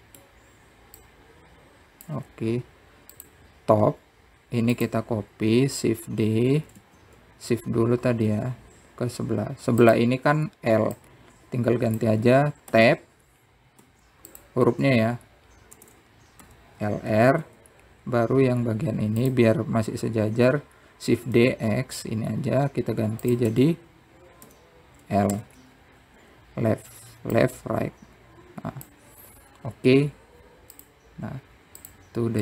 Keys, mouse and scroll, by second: 0.2 click, 1.4-2.8 middle drag, 2.8 click, 6.5 shift+click, 7.8-8.2 scroll down 1, 8.3 shift+d, 12.7-14.1 drag, 14.1-14.5 scroll up 1, 14.5 Tab, 15.6 Tab, 16.1 click, 16.4 Tab, 17.5 BackSpace, 18.2 shift+l, 19.2 Tab, 20.3-21.0 scroll down 1, 21.0 click, 22.9 shift+d, 25.3 Tab, 26.2 BackSpace, 27.1 shift+l, 28.0 Tab, 29.1 click.